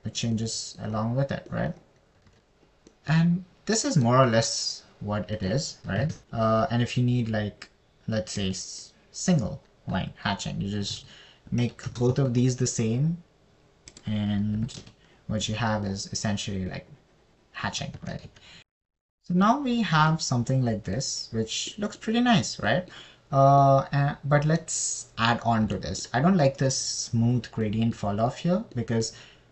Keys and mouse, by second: 1.6-2.2 middle drag, 5.5 middle click, 10.0 click, 15.4 click, 19.0 ctrl+x, 21.5 middle click, 24.1 middle click, 25.0 middle click.